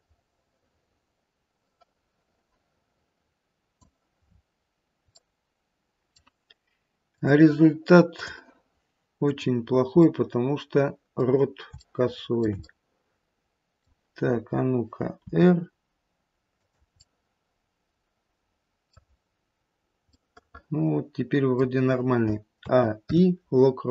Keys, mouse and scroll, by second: 4.2-5.2 scroll up 5, 5.2 middle click, 7.1 click, 8.2 click, 10.0 middle click, 11.9 shift+middle click, 12.2 shift+middle click, 12.8 middle click, 13.0 middle click, 15.2 r, 16.9 middle click, 19.1-19.9 scroll down 2, 20.3 middle click, 20.8 middle click, 22.2 middle click, 22.6 a, 23.0 i.